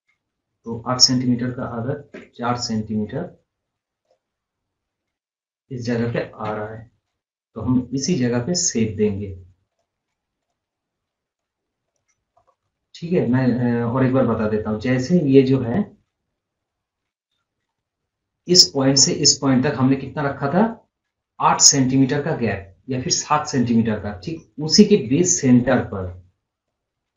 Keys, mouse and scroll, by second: 4.1 click, 5.0-5.4 scroll down 1, 6.5 o, 8.1 click, 11.4 right click, 11.9 click, 12.4 scroll up 1, 12.9 scroll down 1, 14.1 scroll down 1, 14.4 scroll up 1, 15.0 scroll down 1, 15.6 scroll down 1, 15.9 scroll up 1, 16.1 scroll, 16.4 scroll up 1, 16.9 scroll down 1.